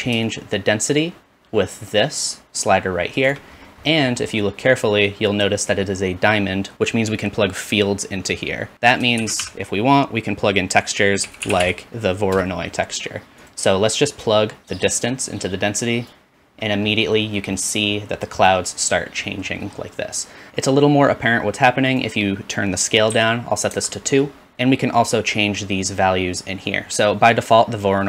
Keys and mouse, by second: 3.3-5.1 shift+middle drag, 5.1-8.7 drag, 9.5 shift+a, 14.4-16.8 drag, 17.8-18.6 drag, 20.5 ctrl+space, 21.9 click, 25.1-25.8 drag.